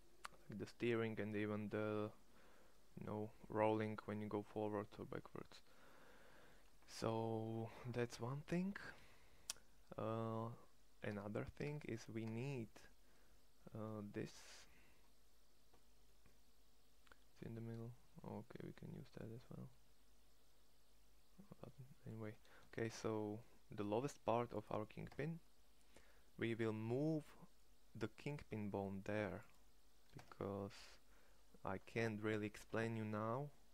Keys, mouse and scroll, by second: 11.0 Tab, 11.6 Tab, 12.3 Tab, 16.2-17.7 middle drag, 17.8 middle click, 18.6 middle click, 19.6-21.6 middle drag, 22.4 shift+s, 25.0 Tab, 30.1 Tab.